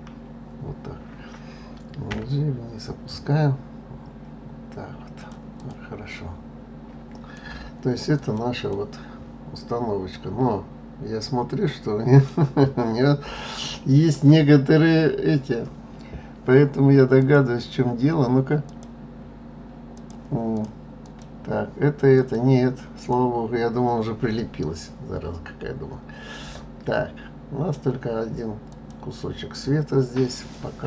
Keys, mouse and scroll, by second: 1.6 g, 5.1 click, 5.6-7.7 middle drag, 7.7 click, 8.3-11.3 middle drag, 16.8 click, 18.2 click, 19.5-20.2 drag, 20.6 click, 21.7 click, 22.5 click, 23.3-23.9 scroll up 3, 23.9-27.0 middle drag, 28.3 click, 30.1-30.8 middle drag.